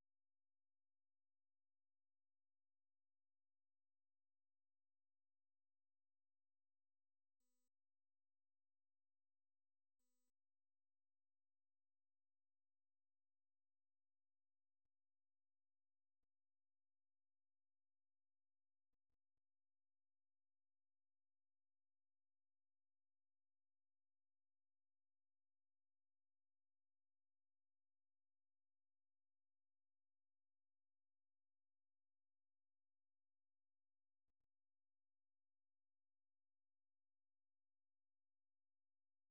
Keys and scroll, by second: 0.0-4.4 typing, 5.5-5.9 typing, 7.1-7.6 typing, 11.6-14.2 typing.